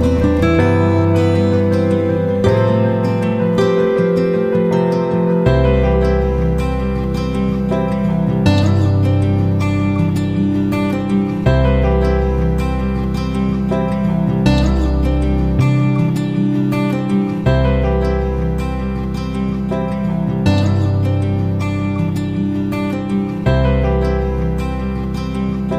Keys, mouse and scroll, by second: 7.0 click, 13.2 ctrl+shift+g, 15.0 click, 20.5 F9, 22.0 click.